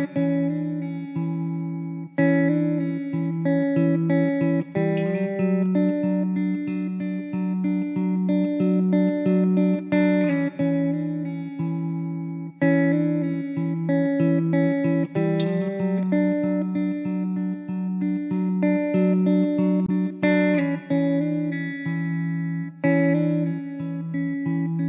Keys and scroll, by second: 0.0 Escape, 0.8 shift+s, 2.3 Tab, 2.6 alt+z, 6.0 KP_0, 6.5 s, 8.6 s, 10.9 Tab, 12.0 1, 12.3 alt+z, 13.6 Tab, 15.7 alt+Tab, 15.8 alt+z, 16.6 Tab, 16.7 alt+z, 20.4 shift+d, 23.9 ctrl+z.